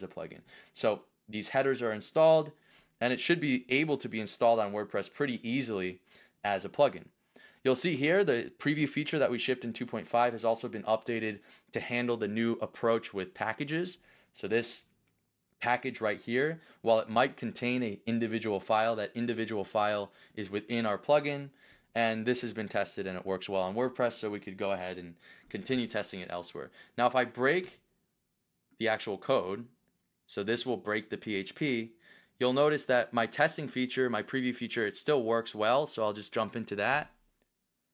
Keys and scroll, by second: 27.7 BackSpace.